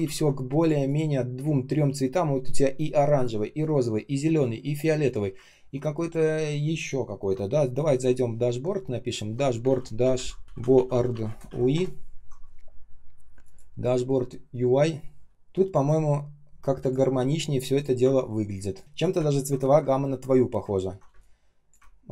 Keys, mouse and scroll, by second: 10.3-11.9 typing, 18.1-18.7 ctrl+scroll down 1, 18.7 ctrl+click, 19.1 ctrl+scroll up 1, 19.3-19.8 ctrl+scroll down 1, 19.8-20.9 ctrl+scroll up 1, 21.0 space, 21.5 space, 21.5 space, 21.8 ctrl+scroll up 1.